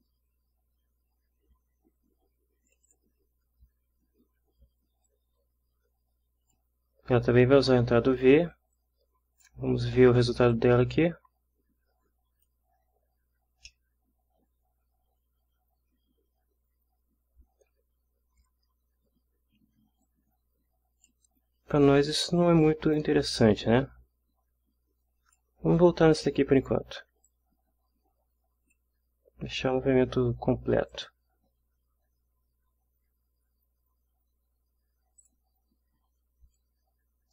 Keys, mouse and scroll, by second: 2.7 click, 5.1-6.7 drag, 8.7-9.6 drag, 10.5-12.6 drag, 13.7-14.7 middle drag, 14.7 scroll up 1, 20.0-21.3 drag, 22.1-23.1 drag, 25.0 click, 26.6 click, 27.3-28.9 drag, 30.9 click, 35.2 click, 36.5-37.3 drag.